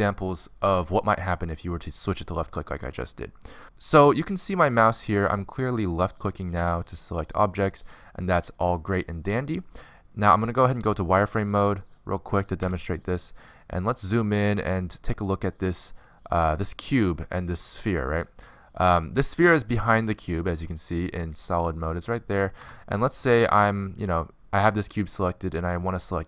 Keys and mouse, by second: 6.6-13.2 drag, 13.2 z, 18.9-20.5 middle drag, 20.5-22.3 drag, 22.3 middle click, 22.7 z, 23.4 z, 25.5 click.